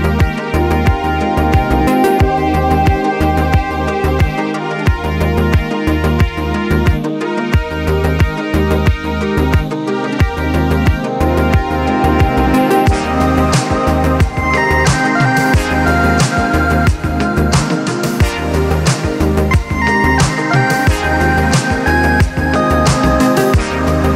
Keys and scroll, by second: 2.8-3.2 typing, 3.6 Return, 6.9-7.3 typing, 7.9 Return, 14.4-15.4 scroll, 15.4 4, 15.8 Return, 16.9 typing, 22.4-22.9 typing, 23.3 Return.